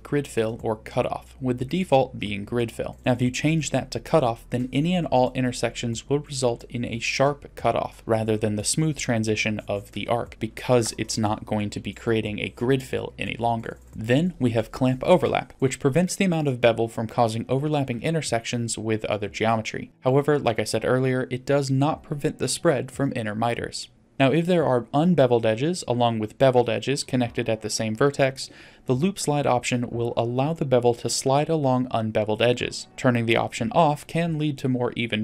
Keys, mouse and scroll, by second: 1.7 middle drag, 2.2-2.7 scroll up 2, 2.8-3.5 shift+middle drag, 7.3-8.4 drag, 10.4-10.9 scroll down 2, 10.9 middle click, 14.6 scroll down 1, 15.5-16.5 drag, 23.0-23.6 drag, 24.1 click, 31.4 click, 33.8 click.